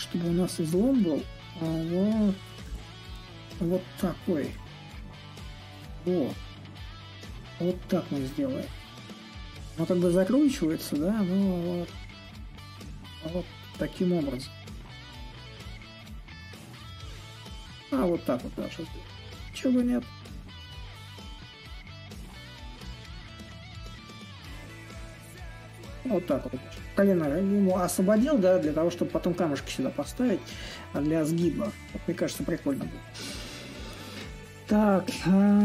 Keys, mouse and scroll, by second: 5.4-10.5 drag, 11.4-16.5 drag, 17.0-22.1 drag, 22.5-27.6 drag, 30.2-35.6 drag.